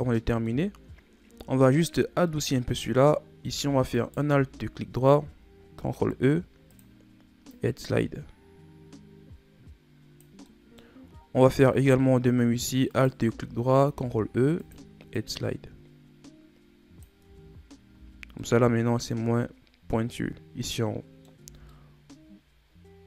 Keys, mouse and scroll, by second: 0.1 middle click, 0.8-1.9 shift+scroll up 5, 2.4-4.1 middle drag, 4.1 alt+right click, 4.7-5.9 scroll down 2, 5.9 ctrl+e, 10.6 middle click, 11.1-12.5 scroll up 1, 13.1 alt+right click, 14.1 ctrl+e, 17.4 Tab, 18.1 a, 18.4 scroll down 1, 18.6-19.3 middle drag, 19.3-20.8 scroll up 2, 20.8-21.6 middle drag, 21.6 Tab, 21.8-23.0 middle drag.